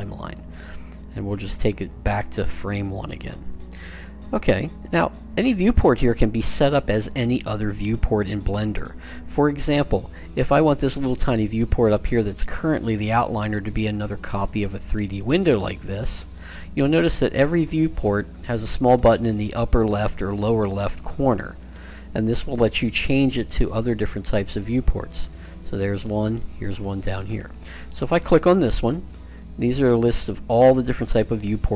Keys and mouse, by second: 2.0-3.7 drag, 28.6-30.5 drag.